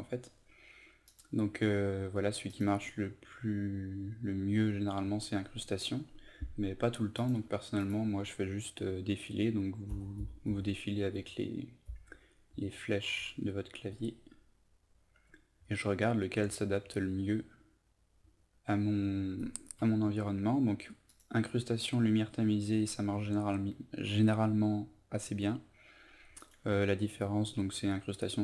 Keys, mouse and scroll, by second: 9.8 Down, 10.1 Down, 10.4 Down, 11.1 Down, 11.8 Down, 21.1 click.